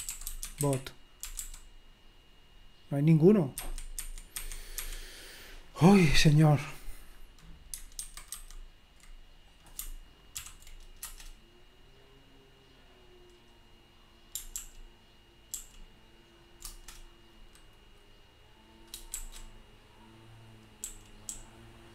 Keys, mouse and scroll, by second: 0.0-1.9 typing, 3.6 Escape, 3.9 Escape, 4.3 Escape, 4.8 Escape, 7.2 click, 8.0 super+1, 8.3 super+2, 9.6 click, 10.4 ctrl+p, 11.0 Return, 14.6 ctrl+p, 15.5 ctrl+p, 16.7 Return, 21.0-21.9 k.